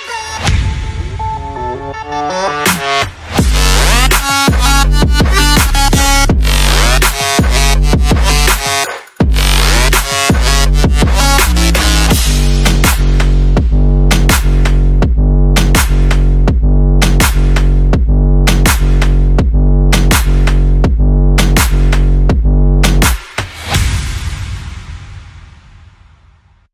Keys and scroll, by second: 5.6 space, 6.1 super+t, 11.4 Return, 17.2 Return.